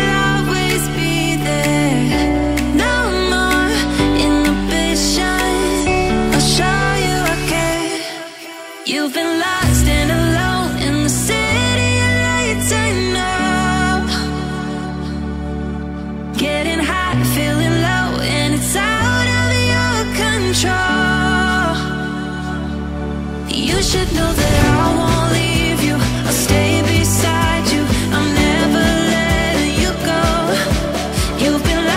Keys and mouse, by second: 0.4 click, 0.6 g, 1.8 right click, 2.2 g, 3.0 click, 3.1 g, 3.5-3.8 right drag, 3.8-4.5 middle drag, 4.9 middle click, 6.5 drag, 7.2 Delete, 7.6 a, 8.3 a, 9.5 Tab, 10.6-13.0 drag, 13.6 middle click, 14.8 g, 17.3 middle click, 17.9 ctrl+a, 19.8 KP_1, 21.8 click, 22.3-22.8 drag, 23.9 click, 25.1-25.5 shift+middle drag, 25.9 shift+middle click, 26.5 click, 27.9 Tab, 28.3 click, 29.3 e, 30.8 click, 31.1 e.